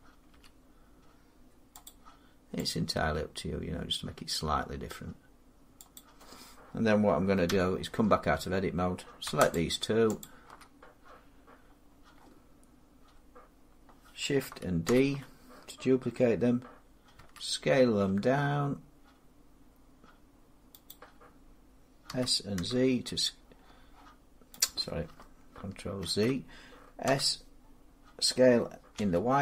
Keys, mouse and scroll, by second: 0.2 g, 1.7 click, 2.7 click, 2.9 g, 5.8 click, 7.3 Tab, 9.4 shift+click, 10.8 click, 14.7 shift+d, 17.0 s, 20.7 click, 21.9 s, 22.4 z, 24.4 typing, 24.5 click, 25.9 ctrl+z, 26.9 s, 28.8 y.